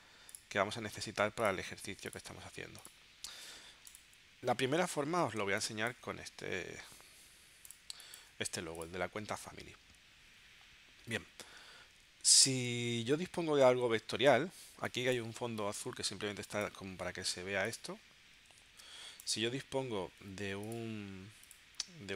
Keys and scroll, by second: 5.5 space, 8.0 space, 18.7 super+z.